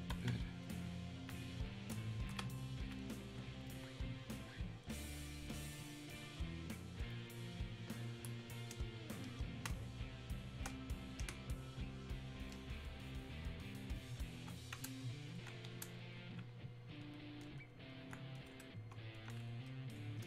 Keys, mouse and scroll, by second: 7.0-9.7 ctrl+drag, 9.7 ctrl+space, 15.4-20.2 alt+drag.